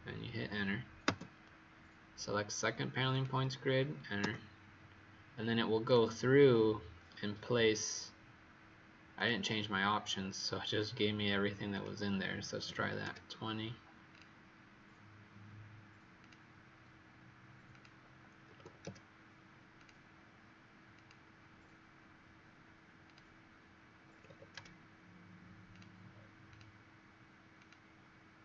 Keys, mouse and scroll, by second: 1.0 Return, 3.0 click, 4.1 Return, 5.8 click, 10.0-11.7 scroll down 3, 11.7 click, 12.6 KP_2, 12.7 KP_0, 13.0 KP_Enter, 14.0 click, 18.4 KP_4, 18.5 KP_0, 18.7 KP_Enter, 19.7 click, 24.0 KP_6, 24.1 KP_0, 24.5 Return, 25.6 click.